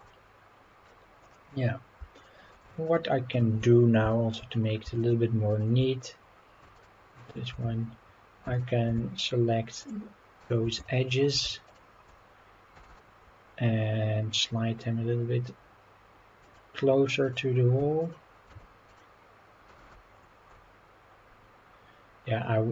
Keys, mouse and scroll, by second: 0.0-0.9 middle drag, 1.2 click, 2.1 shift+click, 3.3 shift+click, 3.8 scroll down 1, 4.1 shift+middle click, 4.5 scroll up 2, 5.0 shift+click, 5.5 shift+click, 6.7 shift+click, 7.5 Tab, 8.4 2, 8.6 click, 9.2 shift+click, 9.8 shift+click, 10.4 shift+click, 10.8-11.2 shift+middle drag, 11.6 shift+click, 12.7 g, 16.4 click, 17.2 click, 17.8 Tab, 18.0 click, 18.5 Tab, 18.9 click, 19.7 g.